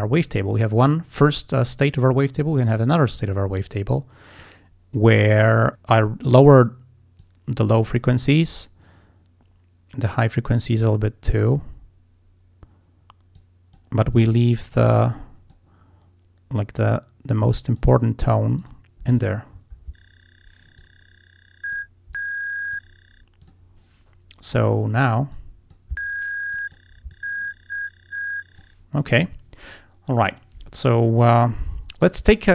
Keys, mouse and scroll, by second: 2.6 click, 3.6-4.7 drag, 6.2 click, 7.2 click, 10.1-11.6 drag, 13.4 click, 14.8 click, 16.8-18.0 drag, 18.6 click, 20.8-22.0 drag, 22.2 click, 23.5 click, 25.4 click, 26.6 click, 27.2-28.9 drag.